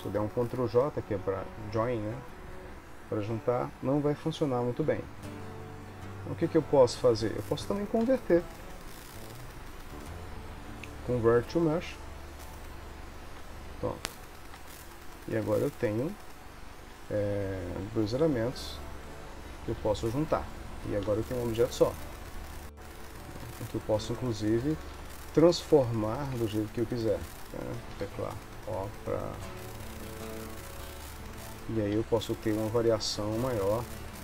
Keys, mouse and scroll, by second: 7.3 click, 14.0 Tab, 14.7 Tab, 15.5 shift+click, 19.9 ctrl+j, 21.2 g, 22.5 ctrl+s, 23.5 Tab, 25.0 3, 26.4 1, 27.1 click, 28.1 o, 29.6 g, 31.3 click, 32.1 g, 33.2 g, 34.1 click.